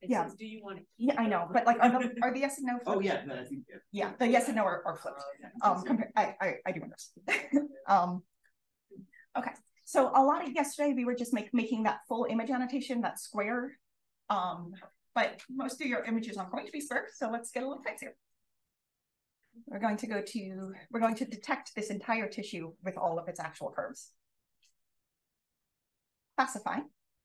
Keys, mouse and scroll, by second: 8.2 click.